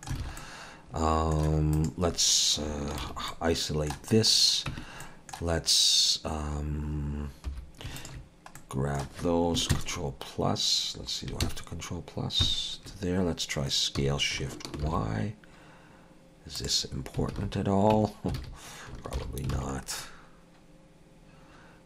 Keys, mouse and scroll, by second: 0.2 alt+a, 0.4 middle click, 1.7 click, 3.0 shift+h, 3.3 middle click, 4.3-4.7 scroll up 2, 4.7 Tab, 5.0 middle click, 7.8 3, 8.0 alt+shift+click, 8.6 middle click, 9.7 ctrl+KP_Add, 11.7 ctrl+KP_Add, 12.4 ctrl+KP_Subtract, 14.0 s, 17.3 alt+a, 17.9 Tab, 18.4 alt+a, 19.2 alt+h, 19.5 alt+a, 19.8 scroll down 2, 20.0 middle click.